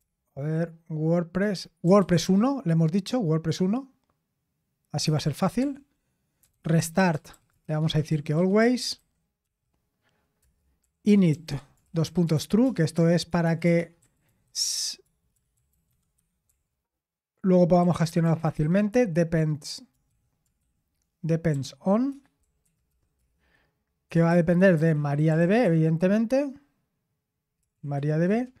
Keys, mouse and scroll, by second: 0.0-0.5 typing, 1.6-2.4 typing, 5.1 Escape, 5.6-19.1 typing, 20.6 typing, 22.9-26.1 typing, 27.4-28.6 typing.